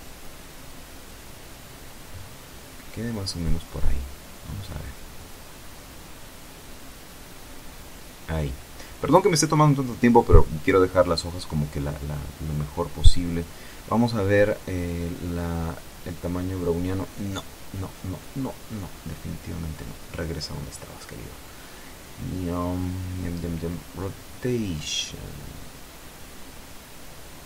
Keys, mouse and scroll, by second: 3.3-5.1 scroll up 1, 5.1-8.1 drag, 8.1 scroll up 1, 10.4 scroll up 1, 10.6 scroll down 1, 12.8-20.1 drag, 21.4-22.2 scroll down 2, 24.3 click.